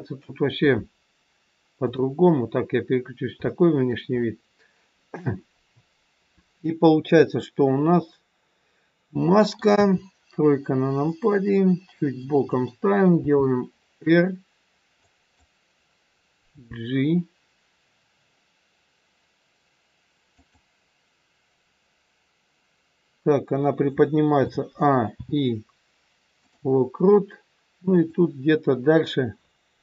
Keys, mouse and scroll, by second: 1.8 click, 2.8-3.4 scroll up 2, 3.6 shift+middle click, 4.1 scroll up 1, 7.0 click, 7.9 middle click, 9.8 KP_3, 11.0 middle click, 13.2 r, 16.5 g, 24.3 a, 25.1 i, 27.9 click.